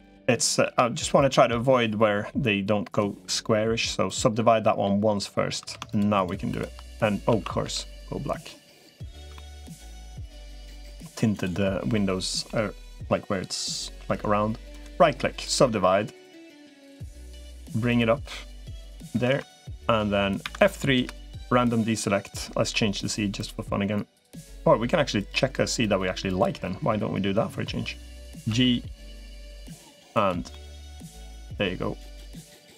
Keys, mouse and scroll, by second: 0.1 middle click, 2.7-4.1 right drag, 4.4 middle click, 5.5 3, 5.7 shift+click, 6.3 shift+click, 7.1 a, 7.5 g, 9.2 shift+middle click, 9.7 g, 11.7 middle click, 14.7 right click, 16.9 click, 17.7-19.3 drag, 20.3 F3, 26.1 click, 28.3 g, 30.3 shift+middle click, 31.1 g.